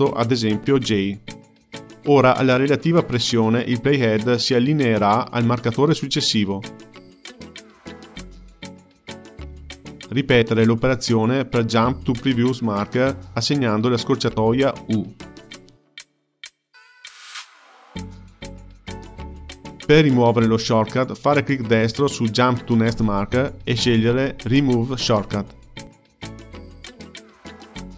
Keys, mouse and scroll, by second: 5.1 click, 5.6 j, 6.1 j, 7.1 ctrl+middle click, 7.9 click, 8.8 j, 9.1 j, 9.2 j, 9.5 j, 10.8-12.6 drag, 15.1-16.9 typing, 21.9-25.0 drag.